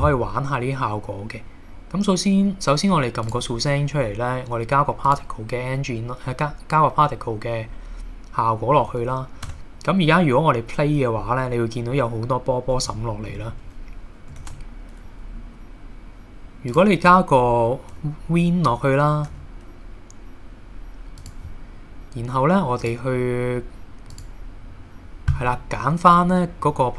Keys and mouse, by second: 3.3 click, 5.1 click, 9.5 space, 12.9-13.3 shift+middle drag, 14.4 shift+a, 19.3 g, 21.2 click, 22.8 click, 24.1 click.